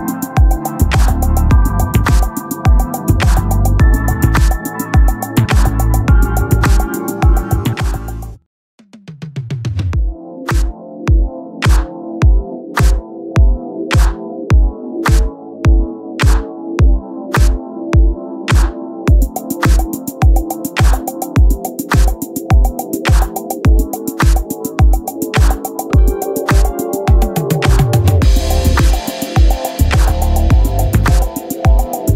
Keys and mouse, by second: 0.5 click, 3.6 click, 9.5 click, 11.6 click, 17.7 click, 30.5 click.